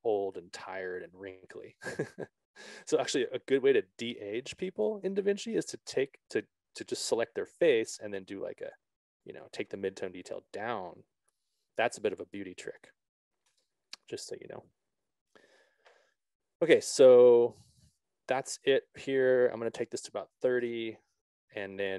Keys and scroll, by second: 5.4 Return, 13.9 0, 14.3 Return, 21.1 Return.